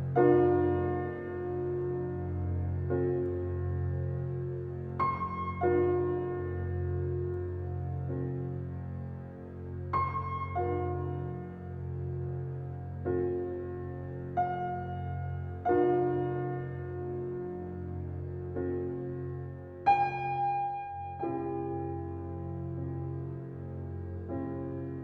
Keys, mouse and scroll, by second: 1.6 scroll up 1, 2.1-3.5 scroll down 1, 3.5-6.0 drag, 5.7-6.6 typing, 7.1 click, 9.8-11.5 typing, 12.0 Return, 13.3 click, 14.5 right click, 15.6-22.4 drag, 22.4 scroll up 1, 23.8-25.0 drag.